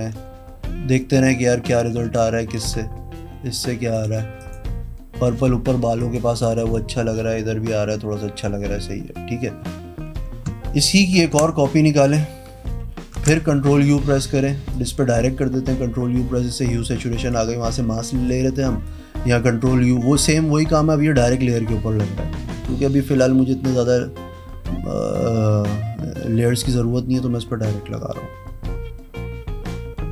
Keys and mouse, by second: 0.0-2.0 typing, 3.9 click, 4.4 click, 5.9 click, 6.5-10.4 drag, 11.2 ctrl+j, 13.1 ctrl+i, 14.7-17.2 drag, 18.8-22.9 drag.